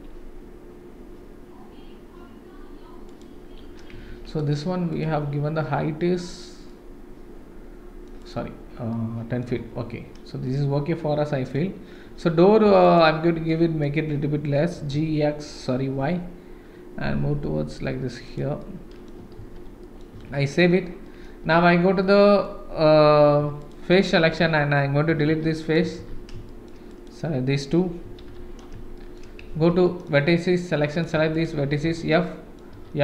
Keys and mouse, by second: 3.9 Tab, 4.3 click, 6.7-8.0 middle drag, 8.2 click, 8.9-9.4 middle drag, 9.5 Tab, 10.5-11.5 middle drag, 12.9 alt+click, 13.5 middle click, 14.7 g, 18.6 middle click, 19.4 ctrl+s, 19.8 middle click, 20.1 Tab, 21.0 middle click, 21.4 Tab, 22.0 middle click, 23.4 3, 23.6 click, 24.0 middle click, 25.1 x, 25.6 click, 25.8 x, 26.4 shift+middle click, 26.9 click, 28.0 x, 28.9 shift+middle click, 29.5 1, 29.8 middle click, 31.3 shift+click, 31.8 f, 32.2 middle click, 32.7 f.